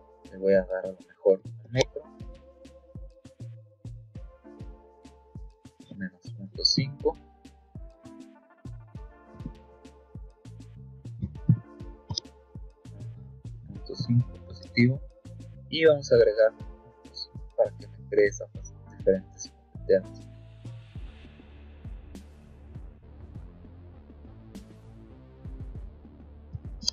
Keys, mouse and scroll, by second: 0.1 click, 1.3 KP_1, 1.5 KP_Enter, 4.1 click, 5.7 KP_Subtract, 6.1 KP_0, 6.4 KP_Decimal, 6.7 KP_5, 8.4 click, 10.9 KP_0, 11.1 KP_Decimal, 11.4 KP_5, 13.4 KP_0, 13.6 KP_Decimal, 13.9 KP_5, 16.7 click, 19.9 click, 21.4 click, 23.4 click, 26.7 Escape.